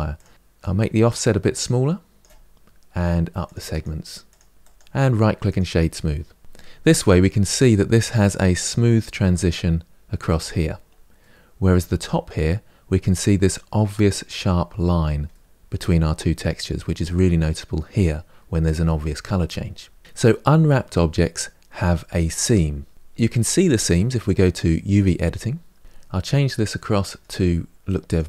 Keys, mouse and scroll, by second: 0.0-5.3 drag, 5.3-11.0 right drag, 11.0 middle click, 11.8-12.3 scroll up 1, 12.3-14.0 scroll up 2, 14.0-15.1 scroll up 1, 15.1-19.5 middle drag, 19.5-21.9 scroll down 3, 21.9-25.8 middle drag, 25.8 click, 27.9 click.